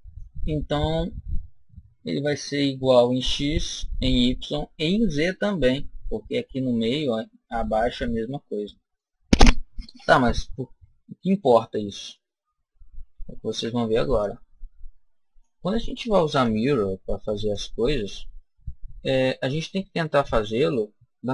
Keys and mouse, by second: 0.6-2.5 middle drag, 5.5-7.3 middle drag, 8.0-9.9 middle drag, 9.8 KP_1, 13.3 b, 16.2 Delete, 19.4-21.3 middle drag, 21.2 KP_7.